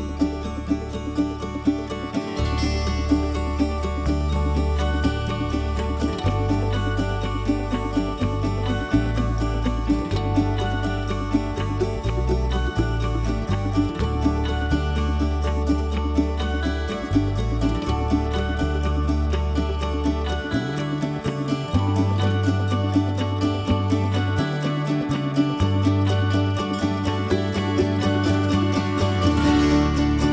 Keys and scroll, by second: 6.7 Escape, 13.1 h, 16.5 m, 28.7 Escape.